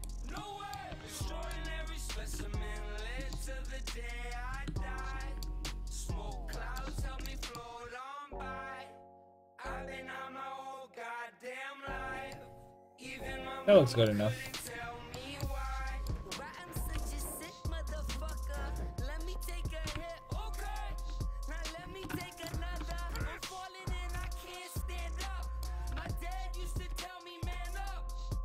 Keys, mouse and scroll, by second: 0.5 click, 0.9 a, 2.2 s, 3.1-4.5 drag, 3.2 a, 4.6 Tab, 9.2 middle click, 12.4-13.4 middle drag, 13.3 a, 14.9 Tab, 16.0-18.1 drag, 16.9 g, 19.9 g, 21.8 click, 21.9 a, 22.1-23.8 drag, 23.8-25.6 right drag, 24.2 g, 25.9 g.